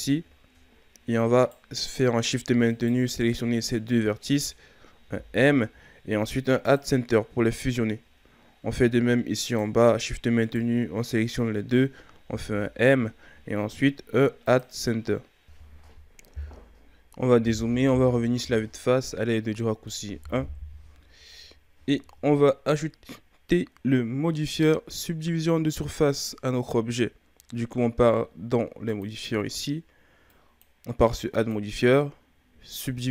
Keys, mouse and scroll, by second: 0.3-1.4 shift+scroll up 3, 1.4 right click, 2.7 shift+right click, 5.0 m, 8.1-9.4 scroll down 8, 9.4 right click, 10.4 shift+right click, 12.2 m, 16.9-19.3 scroll down 4, 19.3 scroll down 2, 19.6 middle click, 20.4 KP_1, 21.4-22.0 scroll down 4, 22.5-24.5 ctrl+scroll up 2, 24.5 Tab, 26.0-26.8 ctrl+scroll up 1, 26.8-28.9 scroll up 1, 28.9 click, 30.3-31.3 drag, 32.8-33.1 drag.